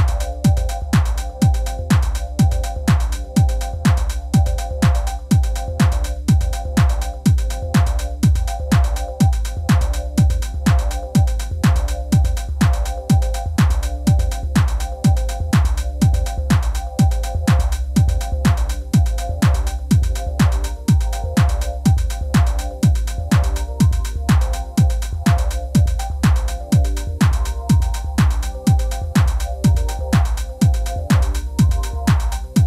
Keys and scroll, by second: 8.2-9.1 typing, 21.4 typing, 30.8 super+ㅊ, 31.1 super+ㅍ.